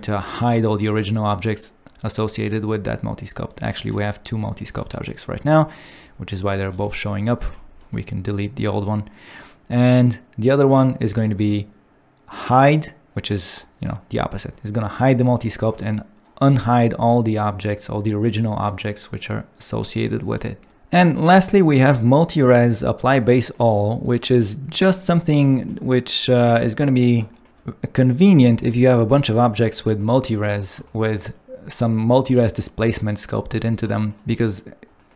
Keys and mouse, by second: 0.9 g, 2.2 right click, 3.9 g, 4.6 right click, 6.0 g, 6.5 right click, 7.4 x, 8.6 click, 12.6 click, 23.3 shift+middle click, 34.9 shift+middle click.